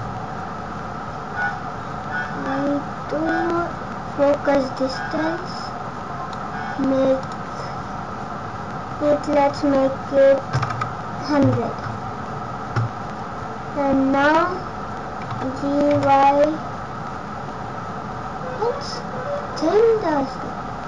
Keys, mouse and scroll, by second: 2.2 scroll up 1, 4.8 click, 7.1 click, 10.8 KP_0, 15.3 g.